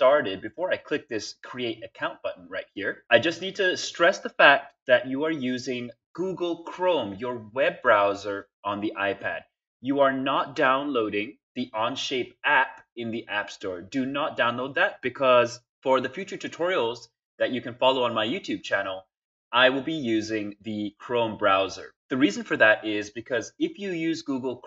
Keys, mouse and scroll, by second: 7.2 click, 11.5-13.3 drag, 21.4 click, 21.6 click.